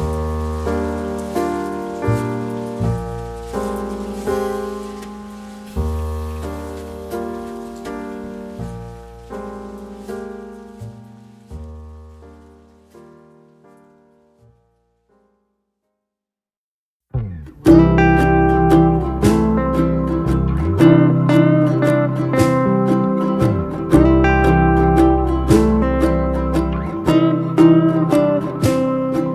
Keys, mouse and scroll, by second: 2.0-2.6 ctrl+scroll down 1, 2.6 scroll down 1, 16.6 ctrl+scroll up 1, 20.4 ctrl+v, 20.5-20.8 ctrl+scroll down 1, 22.4-23.0 scroll down 1.